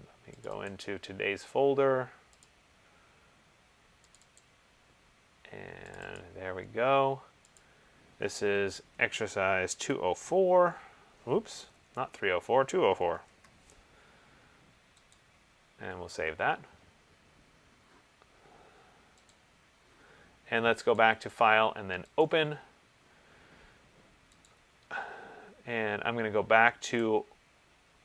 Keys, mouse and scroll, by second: 0.6 click, 0.8 click, 2.7 click, 4.3 click, 4.6 click, 6.1 click, 6.4 click, 7.7 click, 8.8-10.3 typing, 11.7-13.8 typing, 15.3 click, 19.5 click, 21.2 click, 22.4 click, 27.2 click.